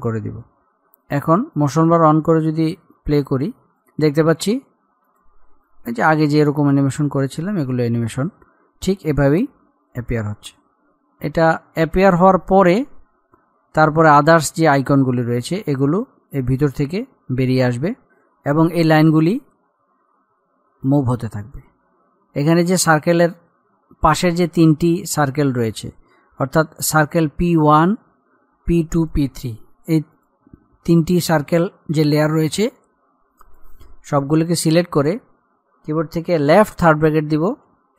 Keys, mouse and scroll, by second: 11.0-11.9 scroll up 1, 15.0 click, 21.1 click, 22.2-22.5 scroll up 1, 29.3 click.